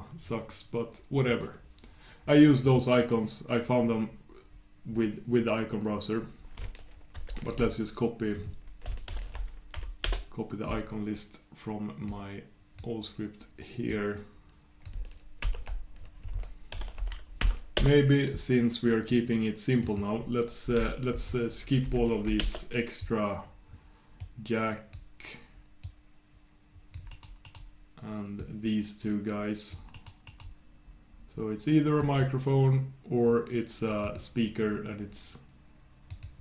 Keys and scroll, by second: 10.2 shift+super+Return, 21.3 shift+super+Return.